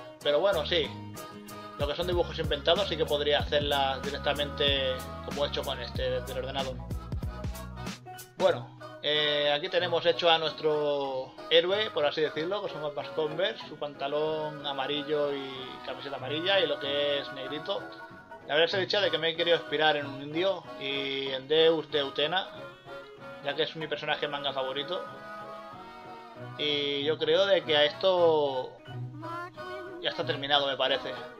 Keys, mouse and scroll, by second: 0.4 ctrl+z, 1.4 scroll up 1, 2.4 scroll up 1, 2.8-3.4 scroll down 2, 3.0 ctrl+z, 5.0 scroll up 1, 6.6 scroll up 1, 7.4 scroll up 1, 10.1 scroll up 1, 16.0 scroll up 1, 16.3 scroll down 1, 17.7 ctrl+z, 18.7 scroll up 1, 19.4 scroll down 1, 21.4 scroll up 1, 22.5 scroll down 1, 23.8 ctrl+z, 24.2 scroll up 1, 24.3 scroll down 1, 25.3 scroll up 1, 25.3 scroll down 1, 26.6 scroll up 1, 28.0 scroll up 1, 28.4 ctrl+z, 30.3 scroll up 1, 30.4 scroll down 1, 31.1 scroll up 1, 31.2 ctrl+z.